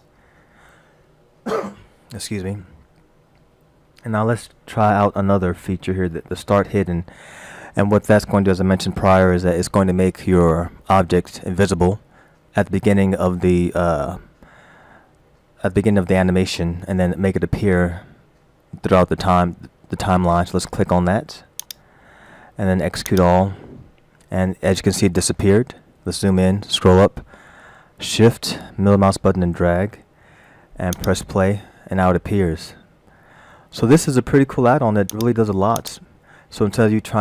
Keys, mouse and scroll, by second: 21.7 click, 23.1 click, 26.5-27.0 scroll up 3, 27.4 shift+middle click, 30.9 click, 35.1 click, 35.8 click.